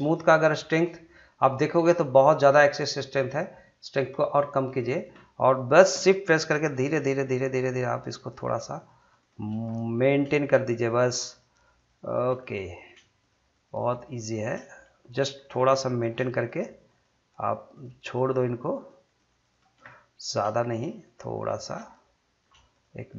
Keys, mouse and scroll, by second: 0.1 click, 3.0-6.3 drag, 9.7 middle click, 10.4 shift+click, 12.4 middle click, 13.2 shift+click, 14.6 shift+middle click, 15.1 scroll up 2, 15.4 shift+middle click, 16.4 shift+click, 19.9 middle click, 20.7 shift+click, 21.8 shift+scroll down 1, 21.9 middle click, 22.7 shift+click.